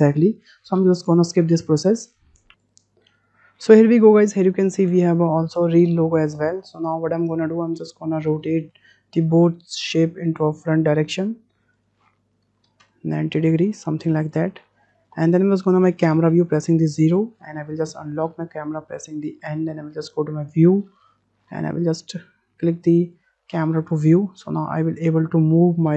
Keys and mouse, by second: 2.5 ctrl+z, 2.7 ctrl+z, 3.1 click, 6.7-7.5 middle drag, 7.8-8.2 drag, 8.4 middle drag, 9.4-10.9 drag, 11.7-13.4 drag, 15.2 shift+click, 18.2 n, 19.6 click, 23.0 click, 24.3 middle click, 24.5-24.8 drag, 25.0-25.3 shift+drag, 25.6 middle click.